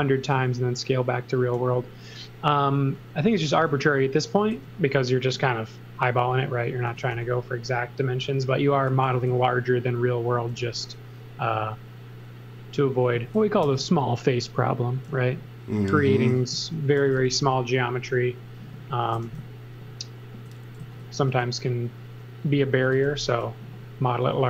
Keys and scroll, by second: 1.5 e, 4.5 b, 6.6-7.6 typing, 8.8 x, 9.1 space, 10.5 m, 13.6 super+z, 16.3-17.6 typing, 19.1 e, 20.8 z, 21.2 space, 22.6-23.6 typing.